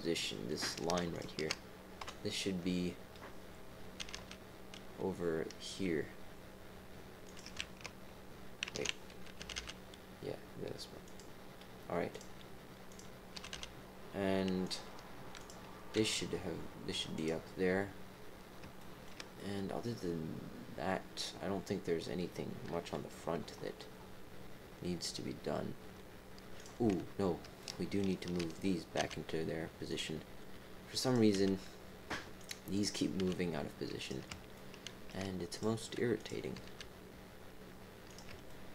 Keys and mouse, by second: 1.1 alt+shift+click, 2.0 KP_7, 4.0 g, 8.6 ctrl+z, 9.3 g, 12.1 click, 12.9 click, 13.3 g, 15.3 click, 15.9 g, 18.7 shift+middle click, 19.3-21.9 middle drag, 20.7-21.9 drag, 20.7-21.9 right drag, 22.7 KP_3, 26.5 click, 27.6 shift+click, 29.0 g, 31.0 click, 31.3 g, 32.7 click, 34.0 g, 34.5 shift+click, 35.5 click, 36.1 click, 36.5 g, 38.4 shift+click.